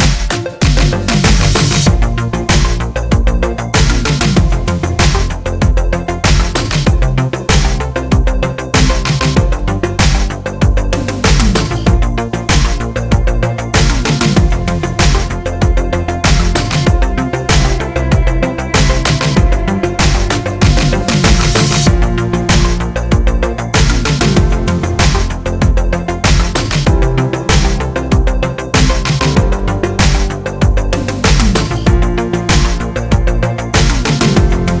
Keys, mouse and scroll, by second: 0.0-3.0 drag, 0.2 Tab, 1.4 a, 3.1-4.1 middle drag, 3.3 scroll down 2, 3.7 Tab, 4.1 click, 4.3-6.5 middle drag, 4.8 scroll down 2, 6.0 scroll up 2, 6.5 click, 6.6 Tab, 6.7 middle click, 7.3 click, 7.6 3, 8.0 click, 8.3 shift+click, 8.7 shift+middle click, 8.8-9.1 scroll up 2, 9.1 g, 9.6 click, 11.1 ctrl+r, 11.3 ctrl+z, 12.3 e, 13.8-14.2 middle drag, 14.2 click, 14.6 shift+click, 15.6 e, 17.9 click, 19.5 click, 19.5-24.1 middle drag, 19.8 Tab, 20.0 scroll down 2, 20.2 click, 23.4 KP_7, 23.6 Tab, 24.1 click, 24.6 scroll up 2, 24.8-25.9 shift+middle drag, 25.2 ctrl+r, 25.9-27.6 drag, 28.0 s, 29.0 ctrl+z, 29.6-30.6 drag, 30.0 s, 30.7 s, 31.5 g, 32.4 alt+click, 32.6 g, 33.2 middle click, 33.6 3, 33.6 click, 33.9-34.8 middle drag, 33.9 g, 34.7 scroll down 2.